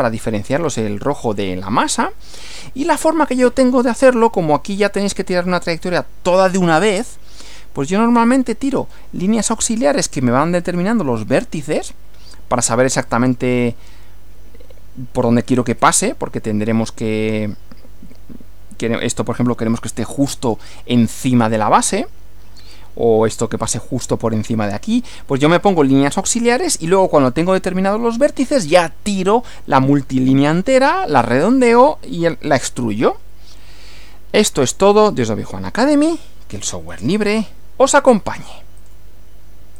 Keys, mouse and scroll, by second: 36.9 click, 38.8 click.